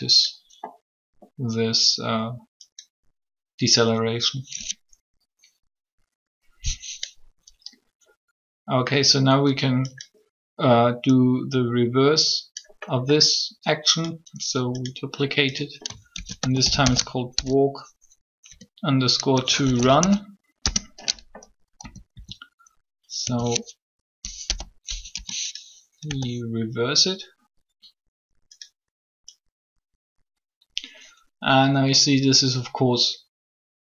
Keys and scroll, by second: 16.0 shift+w, 16.2 a, 18.5 shift+2, 19.5 shift+r, 19.8 u, 20.6 Return, 21.8 typing, 23.2-26.0 typing.